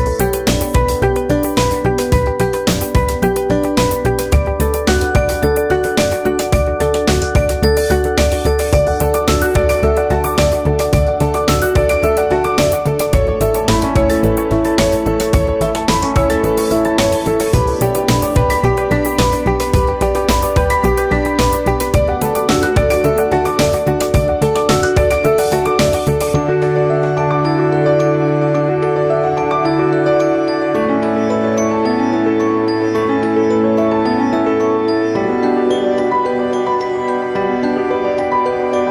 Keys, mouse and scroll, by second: 0.3 f, 0.5-1.7 drag, 1.7 alt+right click, 1.8-5.5 alt+drag, 5.5 shift+c, 5.7 alt+click, 5.8 f, 6.0 alt+click, 6.2 alt+right click, 6.4 alt+click, 6.5 alt+right click, 6.8 alt+middle click, 7.0 f, 7.5-8.9 ctrl+drag, 8.9 alt+middle click, 9.0-10.3 alt+drag, 10.3 ctrl+z, 10.3 ctrl+z, 10.4 click, 10.7 alt+right click, 10.8 ctrl+z, 10.9-13.2 ctrl+alt+drag, 13.2 alt+middle click, 13.5 ctrl+click, 14.4 alt+middle click, 14.8-17.2 ctrl+drag, 17.2 alt+middle click, 17.5 ctrl+click, 18.1 alt+middle click, 18.2 alt+click, 18.4 alt+middle click, 18.5 alt+right click, 18.6 alt+click, 18.8 alt+middle click, 19.3 ctrl+click, 19.7 ctrl+z, 19.8 ctrl+click, 20.6 alt+middle click, 20.8-22.1 ctrl+alt+drag, 22.1 ctrl+z, 22.4-23.4 ctrl+drag, 23.4 alt+middle click, 23.5 alt+click, 23.7 alt+middle click, 23.9 alt+click, 24.1 alt+middle click, 24.2 alt+click, 24.9 alt+middle click, 25.0 alt+right click, 25.2 alt+middle click, 25.3 alt+click, 25.5 alt+right click, 25.7 alt+middle click, 25.8 alt+click, 26.0 alt+right click, 26.1 alt+click, 26.4 alt+middle click, 26.5-28.8 alt+drag, 28.8 alt+right click, 28.9-31.2 alt+drag, 31.2 alt+right click, 31.3 alt+click, 31.5 alt+right click, 31.7 f, 32.0-34.0 drag, 34.0 alt+middle click, 34.1 alt+click, 34.7 alt+right click, 34.9 alt+middle click, 35.1 alt+click, 35.3 alt+middle click, 35.4 alt+right click, 35.5 alt+middle click, 35.8 alt+click, 36.5 q, 37.3-38.9 shift+drag.